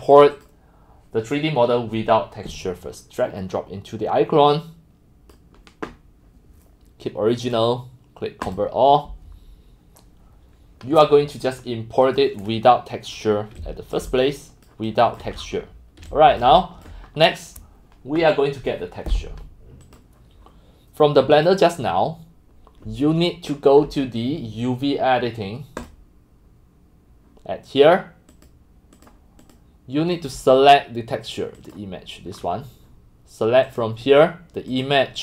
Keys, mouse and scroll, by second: 0.0-17.1 typing, 0.4 click, 2.5-5.3 drag, 12.1 click, 12.7 middle click, 12.7-13.2 scroll, 13.6 click, 14.0 click, 15.0 click, 15.4 scroll, 16.4 click, 17.1 click, 17.1 middle click, 17.2 middle click, 18.8 scroll, 20.0-21.3 drag, 21.5 click, 25.8 click, 28.3 click, 28.9 click, 29.4 click, 30.1 click, 31.6 click, 32.4 middle click, 32.4 scroll, 33.7 middle click, 33.8 click, 34.7 middle click.